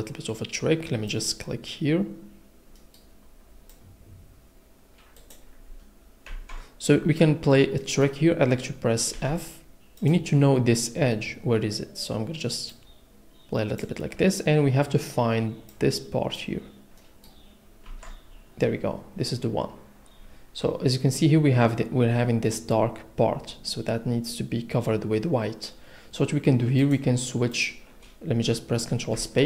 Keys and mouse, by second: 1.1 click, 5.2 click, 6.7 ctrl+z, 7.8 click, 9.1 f, 10.0 click, 15.7 click, 26.9 click.